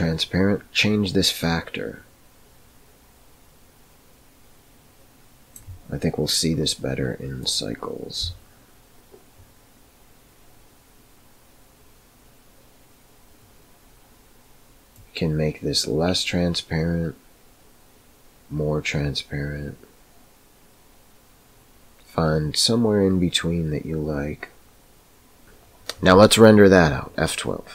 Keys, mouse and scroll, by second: 7.4 click, 15.0-25.4 drag.